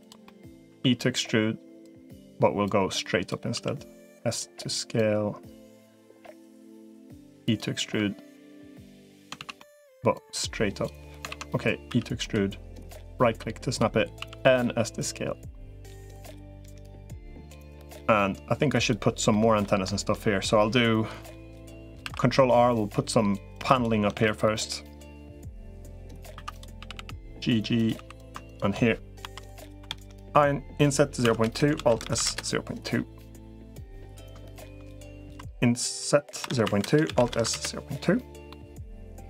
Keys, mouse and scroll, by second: 0.0 middle click, 0.5 e, 2.5 click, 3.3 s, 4.9-6.5 drag, 6.7 e, 7.7 s, 9.3 ctrl+z, 9.4 middle click, 10.1 click, 11.1 ctrl+z, 11.7 e, 12.7-13.7 drag, 14.1 s, 16.3 middle click, 17.5 click, 19.1 middle click, 21.2 middle click, 21.9 ctrl+r, 23.9 ctrl+r, 26.1 2, 26.3 click, 26.7 g, 27.9 3, 29.1 i, 31.5 alt+s, 33.2 middle click, 34.3 shift+click, 35.1 i, 36.9 alt+s, 38.3 middle click.